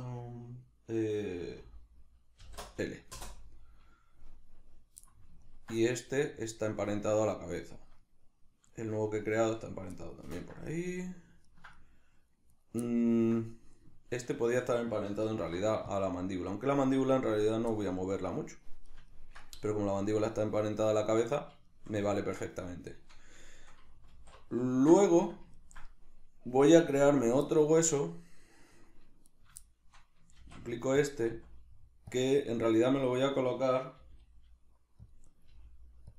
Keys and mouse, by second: 12.5 right click, 12.9 ctrl+middle click, 13.4 middle click, 14.3 shift+right click, 15.3 ctrl+p, 17.7-29.3 middle drag, 24.1 alt+q, 29.3 right click, 29.6-31.0 shift+middle drag, 30.4 shift+d, 31.0 click, 31.3 s, 32.2 click, 32.4 right click, 33.2 right click, 34.0 g, 35.1 click, 35.3 right click, 35.5 g.